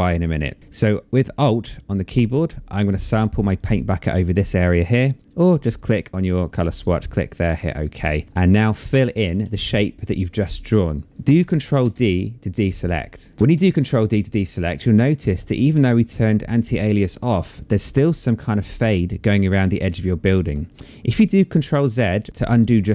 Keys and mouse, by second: 3.0 alt+click, 4.9 click, 6.4 click, 8.5 click, 11.4 ctrl+d, 22.3 click.